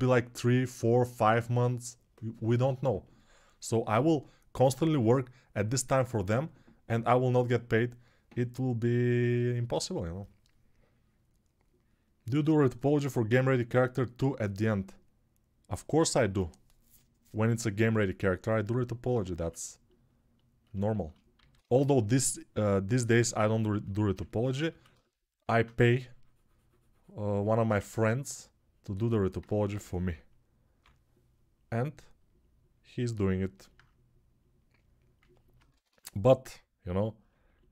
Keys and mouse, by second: 21.1 alt+q, 21.8-29.8 drag, 29.5 g, 29.8-30.6 ], 35.5 ctrl+z, 35.7 ctrl+z.